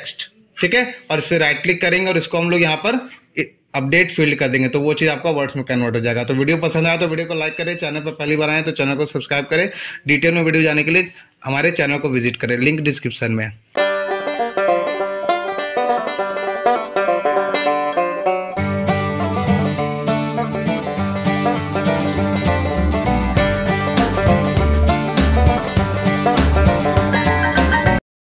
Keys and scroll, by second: 0.0-0.9 typing.